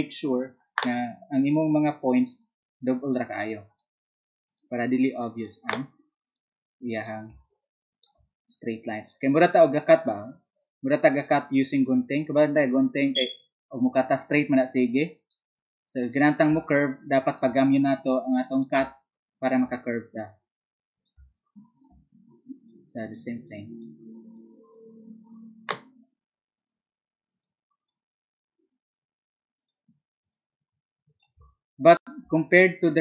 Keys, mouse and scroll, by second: 30.2 click.